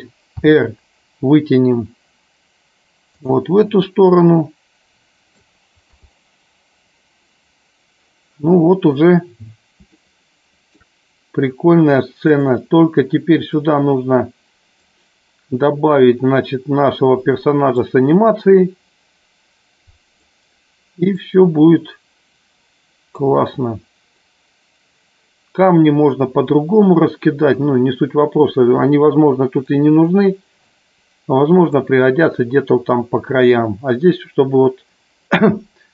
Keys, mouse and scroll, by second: 3.2 click, 4.1-5.6 middle drag, 6.0 KP_0, 10.0-11.0 shift+middle drag, 12.2 click, 13.6-15.1 drag, 17.9-20.4 drag, 21.2-23.4 drag, 29.7-31.9 drag.